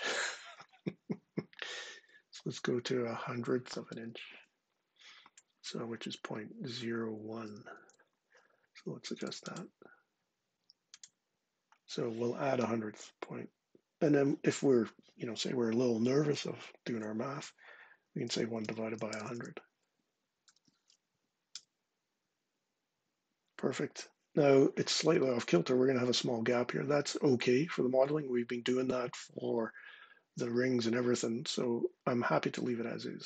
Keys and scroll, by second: 7.6 super+Tab, 16.1 shift+9, 17.8-20.3 typing, 21.3 Return.